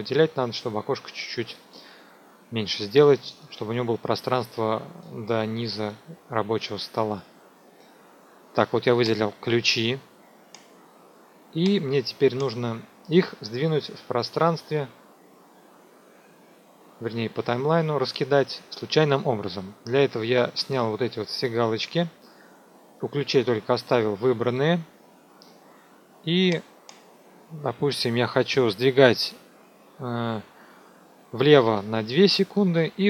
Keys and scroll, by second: 31.6 KP_Subtract, 32.1 KP_2, 32.5 Tab.